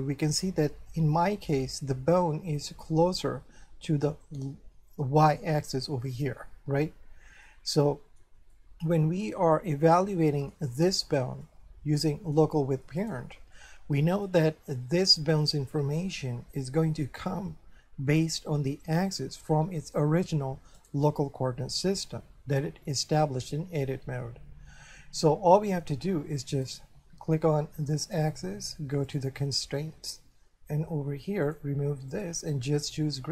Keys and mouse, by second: 5.2 shift+middle click, 7.5 middle click, 8.8 middle click, 9.6 shift+middle click, 11.4 middle click, 13.0 right click, 13.6 middle click, 20.8 right click, 26.7 right click, 29.1 click, 31.5 click.